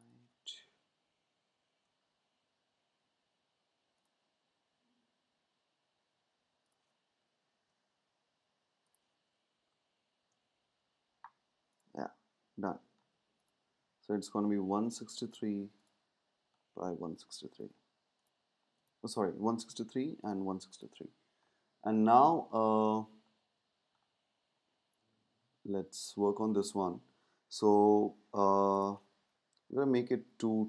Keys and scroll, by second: 0.7 shift+Up, 7.3 shift+Up, 17.6 super+s, 29.6 Up, 29.7-30.6 typing.